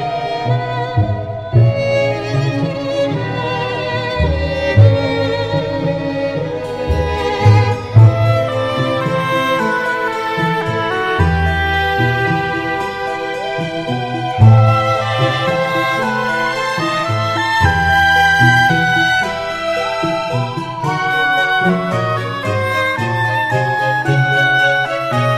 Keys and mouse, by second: 6.7 middle click, 7.8 middle click, 9.5 right click, 14.4 middle click, 19.3 middle click.